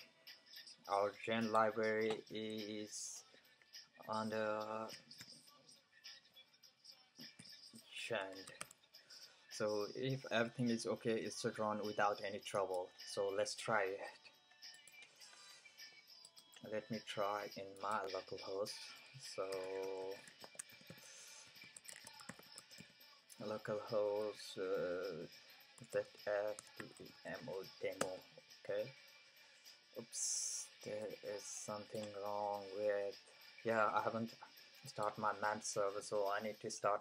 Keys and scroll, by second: 2.8 fn+Right, 4.9 typing, 7.4-9.1 typing, 19.3-23.3 typing, 25.5-27.6 typing.